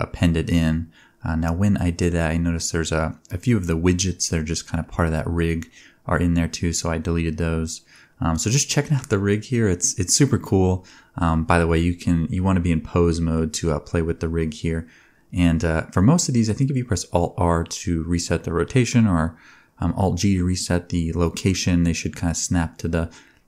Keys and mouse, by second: 0.4-3.2 shift+middle drag, 3.1 ctrl+Tab, 3.4 click, 4.0 g, 6.3 click, 6.7 g, 9.0 alt+g, 9.6 g, 10.6 click, 11.0 g, 12.7 r, 13.3 g, 13.9-15.4 drag, 14.5 r, 17.3 click, 18.8 click, 19.1 g, 20.8 click, 21.0 g, 22.3 click, 22.5 g.